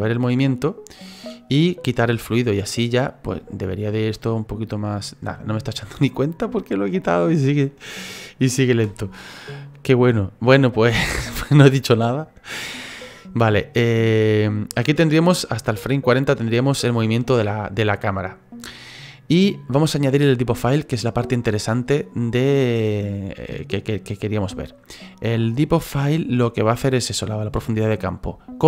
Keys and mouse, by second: 3.3 space, 8.8 space, 10.7 click, 13.4 click, 21.3 click.